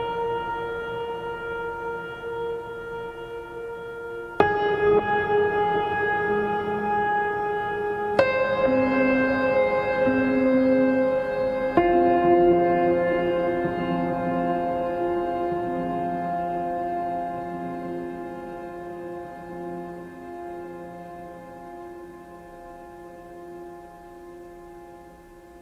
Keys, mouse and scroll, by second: 0.5-1.1 click, 1.0 space, 1.2 click, 1.5-1.8 space, 2.1 click, 10.7 click, 13.3 space, 13.5 right click, 13.7 click, 14.3 space, 14.9-16.1 ctrl+drag, 22.9 space, 23.0 click.